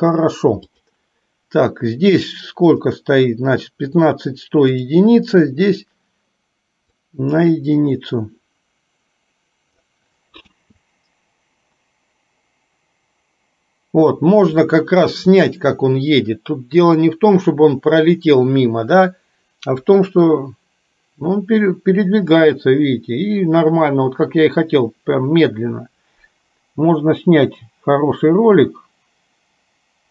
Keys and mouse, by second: 0.8 click, 2.9 click, 4.8 click, 7.2-10.0 drag, 10.6 space.